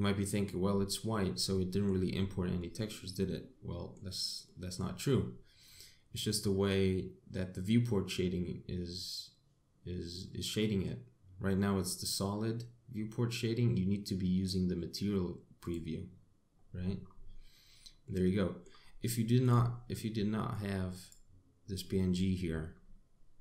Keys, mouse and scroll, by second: 0.5 scroll up 2, 1.0 middle click, 2.0-2.4 scroll down 1, 2.4 middle click, 4.3 middle click, 16.0 click, 16.9-17.7 scroll up 4, 17.9 middle click.